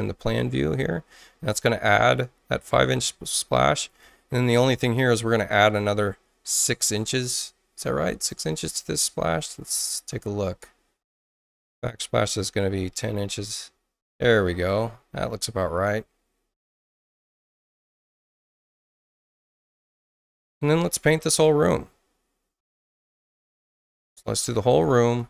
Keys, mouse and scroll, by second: 0.2 click, 3.0 space, 3.8 click, 5.1 ctrl+click, 9.6 click, 11.2 click, 12.1 1, 12.7 0, 13.0 Return, 14.5 space, 21.2 click, 22.6 click, 25.1 click.